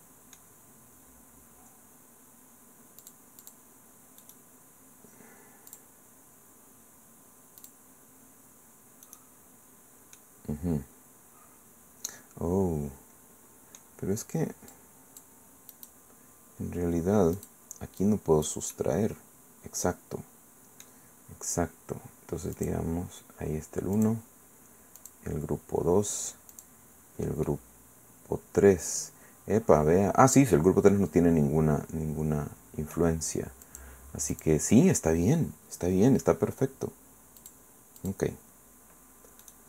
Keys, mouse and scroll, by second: 3.0 click, 3.4 click, 4.2 click, 5.7 click, 7.6 click, 9.1 click, 10.2 click, 10.4-14.2 middle drag, 14.7 click, 15.7 click, 17.4 click, 18.0 click, 18.7-21.0 drag, 21.2-21.9 scroll up 2, 22.6 click, 24.0 click, 25.0 click, 25.7-26.5 scroll down 1, 26.5 click, 27.5-33.1 drag, 33.6 click, 34.3 click, 37.4 click, 38.0 click, 39.4 click.